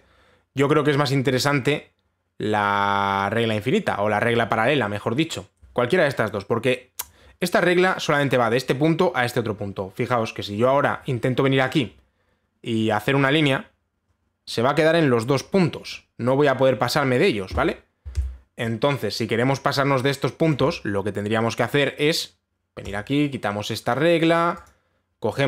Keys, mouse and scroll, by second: 0.5 click, 1.3 click, 3.0 middle click, 11.4 click, 12.4 click, 17.5 click, 18.8 ctrl+z, 21.1 click, 23.5 click, 25.3 click.